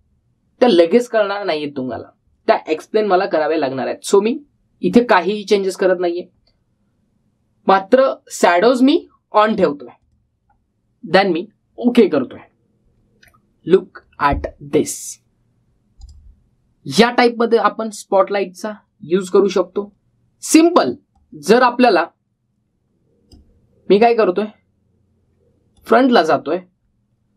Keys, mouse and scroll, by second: 9.3 click, 13.2-14.0 scroll up 1, 14.0-15.8 scroll down 1, 16.8 click, 20.2-24.1 drag.